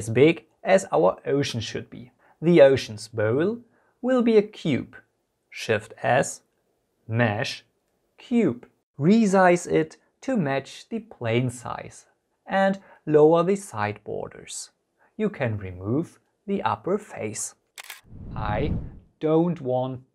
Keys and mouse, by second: 1.3 click, 4.6 shift+a, 8.9 s, 10.7 click, 12.4 z, 13.5-14.2 typing, 14.6 click, 14.9-15.5 middle drag, 15.7 Tab, 16.2 click, 16.4 click, 17.3 Delete, 18.9 Tab.